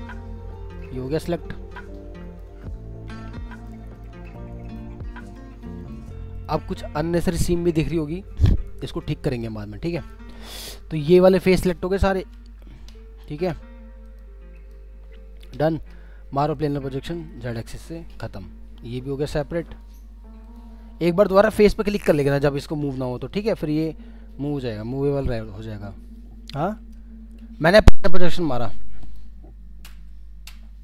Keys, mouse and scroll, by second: 1.0-1.5 scroll down 2, 1.5 alt+middle click, 2.8 scroll up 1, 3.5 ctrl+click, 6.7 middle click, 9.4 alt+middle click, 11.4 scroll down 1, 11.7 alt+middle click, 12.1 typing, 13.2-14.2 scroll, 14.2 scroll up 1, 25.0 scroll down 1, 25.6 alt+middle click, 28.1 middle click, 29.8 typing.